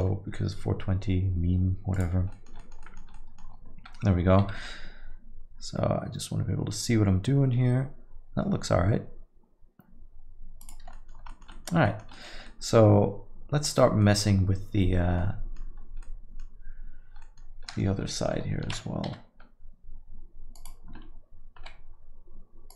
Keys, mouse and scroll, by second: 15.9 scroll, 17.3-17.6 scroll.